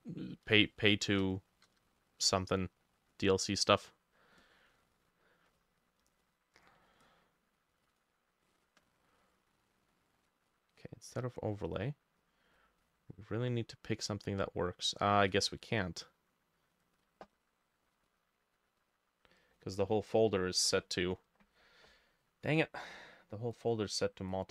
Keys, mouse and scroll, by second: 0.7 shift+click, 1.4 shift+click, 2.0 middle click, 2.0 shift+click, 19.7 Delete.